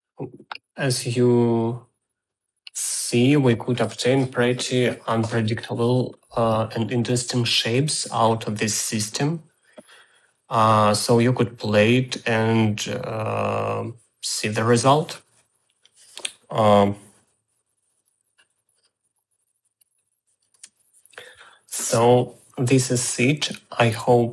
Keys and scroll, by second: 19.8 ctrl+z, 20.5 space.